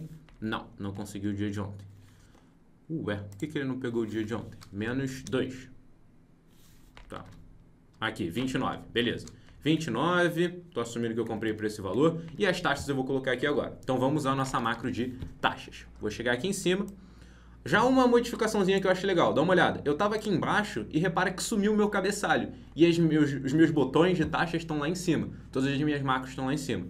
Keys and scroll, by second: 0.9 ctrl+z, 7.2 ctrl+z, 12.4 ctrl+Right.